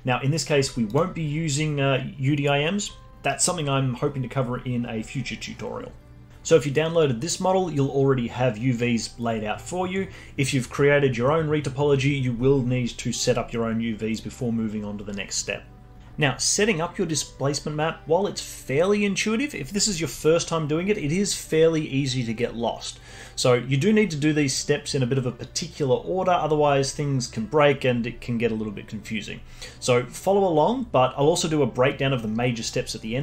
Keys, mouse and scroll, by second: 0.8 click.